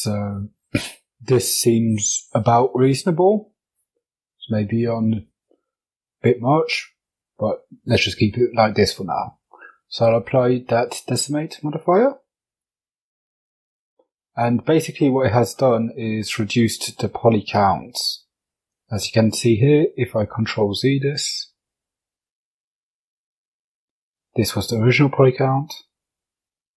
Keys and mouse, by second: 8.0-12.0 drag, 13.3 Tab, 15.0 middle click, 17.0 Tab, 18.4 ctrl+z, 19.1 ctrl+z, 20.0 ctrl+z, 21.9 Tab, 24.2 Tab, 26.5-26.7 drag.